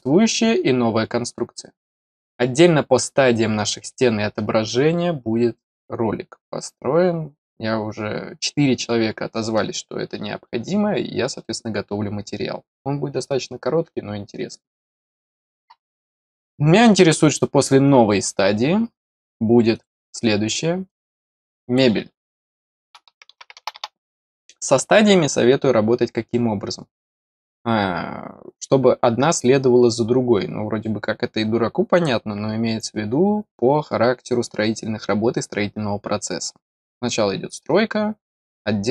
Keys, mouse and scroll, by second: 17.0 click, 19.7 click, 20.8 click, 21.1 click, 21.4 click.